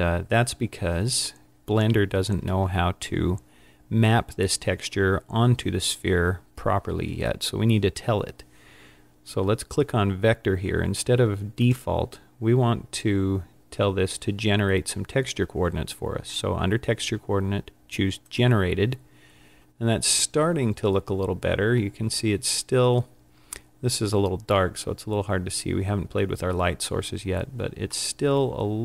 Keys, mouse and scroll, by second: 11.6 click, 28.1 middle click.